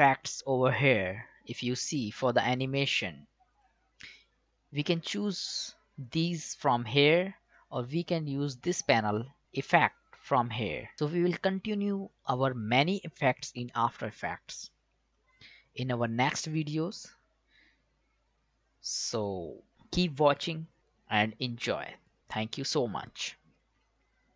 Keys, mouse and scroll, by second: 1.5 click, 10.9 click, 15.1 click.